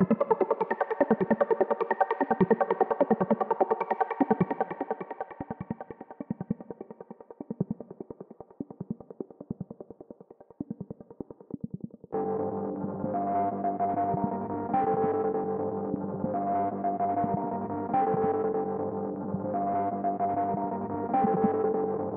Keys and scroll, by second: 0.2 shift+super+Tab.